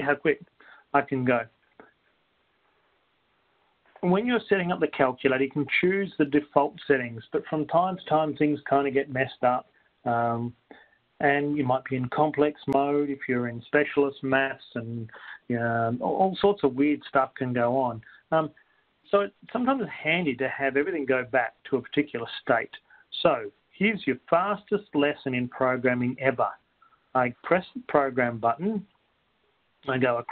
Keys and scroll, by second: 22.6 Right, 23.4 Up, 23.4 Return, 23.4 2, 29.8 Right.